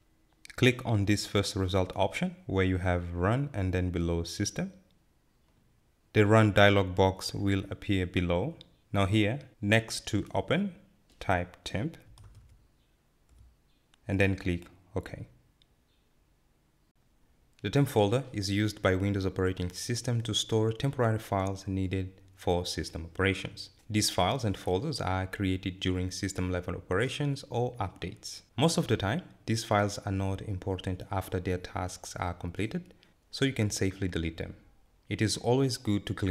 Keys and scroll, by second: 11.2-12.1 typing, 13.1 typing.